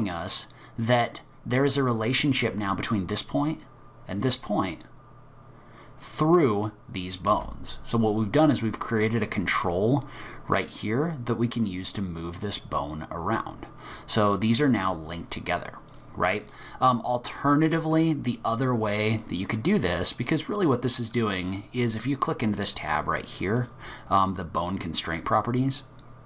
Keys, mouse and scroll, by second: 7.3 g, 19.1 click, 20.1 click, 23.6 click.